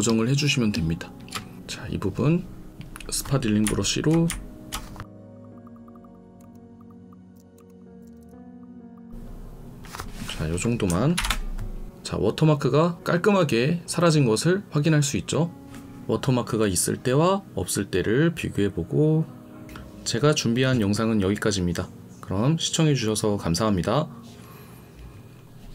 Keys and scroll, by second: 7.3 ctrl+z, 8.2 ctrl+z, 11.1 ctrl+0.